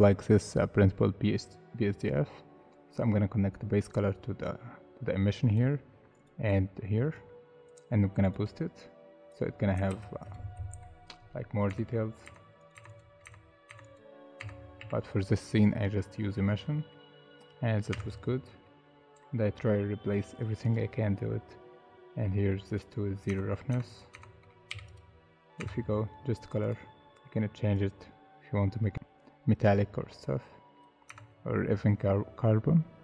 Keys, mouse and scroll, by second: 6.5 double click, 9.9 ctrl+z, 10.7 Delete, 11.7 Tab, 12.2 Tab, 12.7 Tab, 13.2 Tab, 13.7 Tab, 14.4 Tab, 14.8 a, 16.7 middle click, 17.3 scroll up 1, 17.9 Tab, 18.4 scroll down 1, 18.6 middle click, 21.8 scroll up 1, 22.2 middle click, 23.3 Tab, 23.7 Tab, 24.1 Tab, 24.7 3, 25.6 Tab, 31.1 Tab, 32.1 Tab.